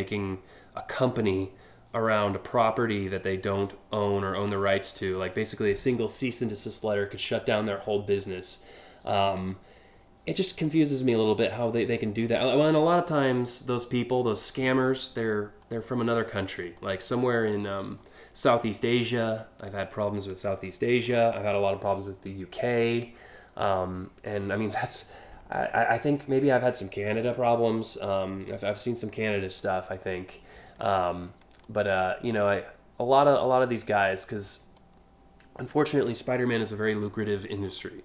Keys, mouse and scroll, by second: 0.5-1.6 ctrl+drag, 2.9-4.0 ctrl+drag, 4.8 ctrl+click, 5.4 ctrl+click, 5.9 ctrl+click, 7.8-9.0 ctrl+drag, 10.3-11.5 ctrl+drag, 13.3 ctrl+click, 14.0-15.2 ctrl+drag, 15.7 ctrl+click, 16.2 ctrl+click, 18.4 ctrl+click, 20.7-21.6 scroll down 4, 23.2 click, 27.8-29.7 drag, 31.2-32.8 alt+drag, 34.3-36.1 ctrl+drag, 36.5 scroll down 2, 37.2 alt+scroll down 1, 37.8 alt+scroll down 2.